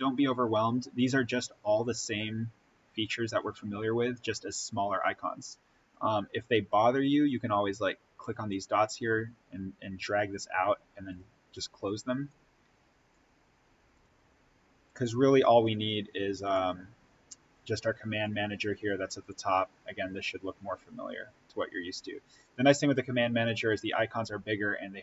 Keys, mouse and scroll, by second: 8.4-19.1 drag.